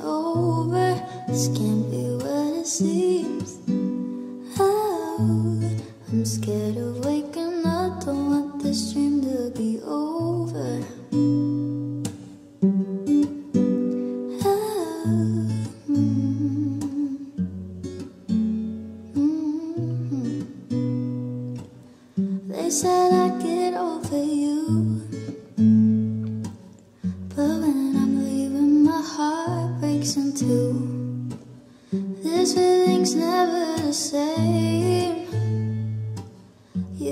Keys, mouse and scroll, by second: 7.9 u, 8.4 u.